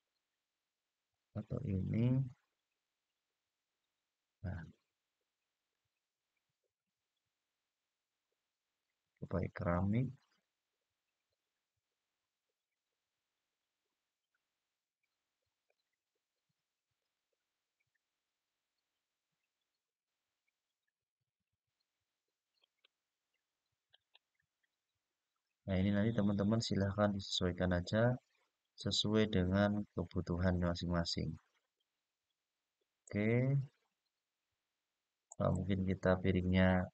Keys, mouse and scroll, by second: 0.8 click, 2.5-5.5 middle drag, 6.7-8.5 scroll down 2, 8.5 click, 9.9 click, 12.6-15.5 middle drag, 17.1 click, 18.6-19.0 scroll down 2, 19.0-19.5 scroll up 1, 20.1-22.3 scroll down 3, 22.3 click, 23.6 click, 26.0-26.7 scroll down 3, 26.7-28.5 scroll up 4, 28.5-31.5 middle drag, 32.8 click, 35.0 click.